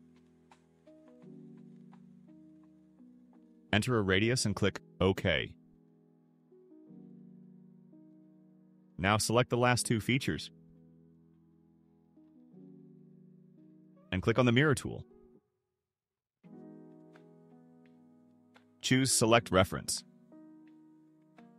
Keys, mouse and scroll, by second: 0.1 click, 2.6 0, 4.0 click, 5.5 click, 6.3 right click, 8.2 click, 9.2 ctrl+click, 15.3 click, 18.4 click, 21.4 click.